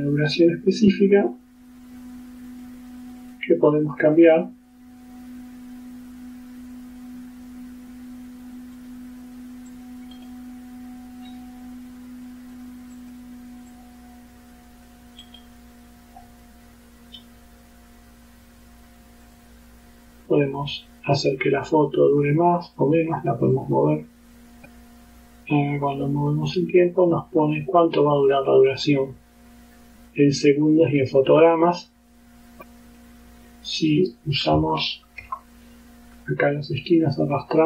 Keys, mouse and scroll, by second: 0.4 right click, 2.6 click, 3.1 click, 4.1 click, 8.8 click, 9.8 click, 10.2 right click, 12.6 click, 13.0 click, 13.8-15.1 drag, 15.3 right click, 19.3 click, 20.6 click, 21.8-23.0 drag, 23.6 click, 24.4 click, 26.4-33.2 drag, 34.8-35.3 ctrl+scroll up 4.